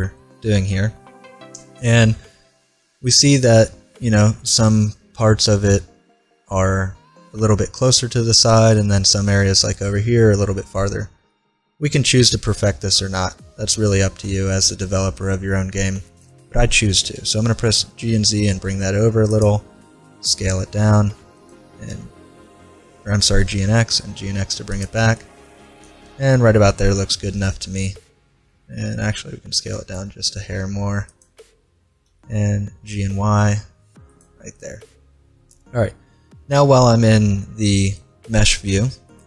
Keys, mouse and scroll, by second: 8.7-10.8 middle drag, 16.7 g, 20.1 s, 21.7 g, 25.2-26.9 middle drag, 29.0 s, 32.1 g, 37.4-39.2 middle drag.